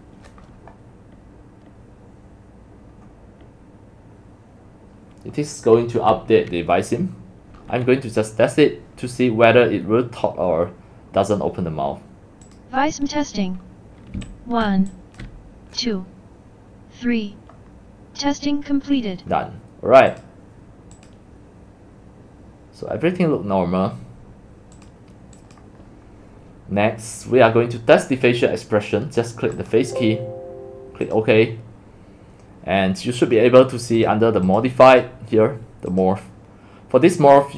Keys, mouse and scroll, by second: 12.6 click, 14.5 typing, 20.3 click, 21.0 click, 24.8 click, 25.2 click, 25.6-26.0 drag, 29.6 click, 31.1 click, 34.5 click, 34.9 click, 35.9 click.